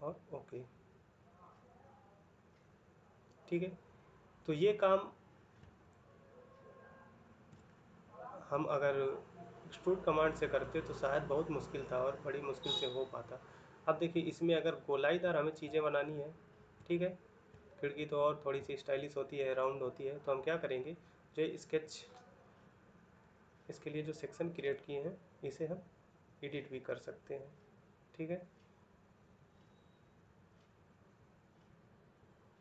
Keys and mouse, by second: 1.8 middle click, 5.4 ctrl+middle click, 7.4 middle click, 12.4 middle click, 14.0 middle click, 15.8 ctrl+middle click, 16.6 middle click, 17.4 ctrl+middle click, 29.9 middle click.